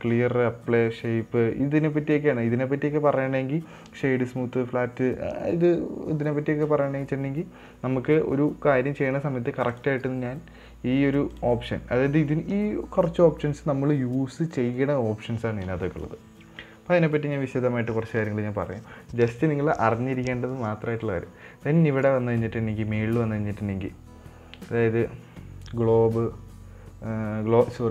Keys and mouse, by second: 10.3-11.0 drag, 11.8-15.1 drag.